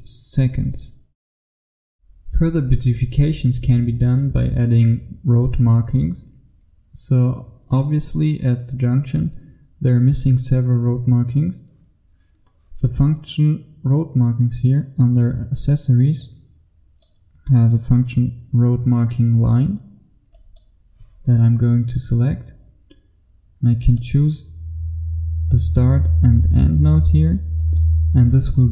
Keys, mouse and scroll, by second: 2.3 F1, 16.3 click, 21.8-24.0 scroll up 1, 24.0 click.